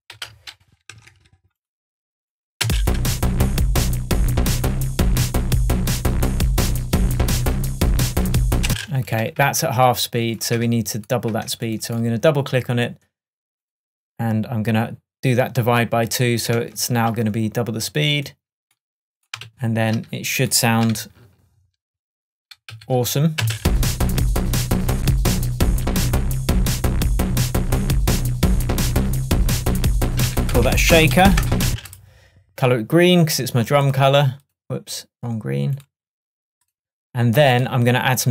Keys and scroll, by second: 0.2 super+l, 1.0 shift+super+Tab, 2.7 space, 8.7 space, 10.6 BackSpace, 19.5 super+s, 21.0 super+d, 22.8 super+d, 23.5 super+space, 24.1 space, 30.3 super+r.